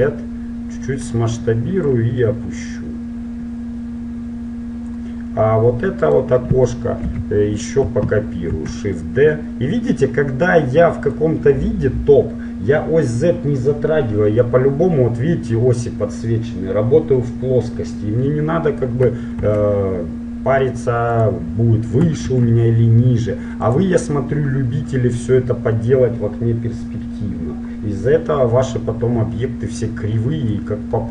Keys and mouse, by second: 2.0-3.9 drag, 6.2 right click, 7.1 click, 7.1 KP_7, 8.7 shift+d, 19.6 shift+d, 22.5 shift+d, 24.3-29.7 middle drag, 29.9-31.1 drag.